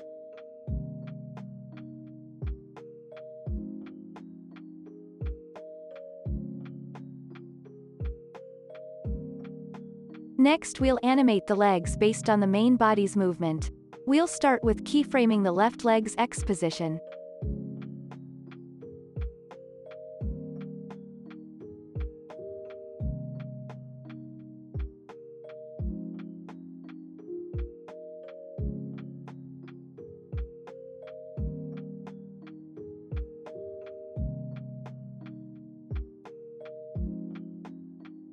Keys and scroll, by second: 11.2 space, 12.8 p, 26.7 x, 29.7-31.0 typing, 33.2 x, 35.1-36.4 typing, 36.5 ctrl+s.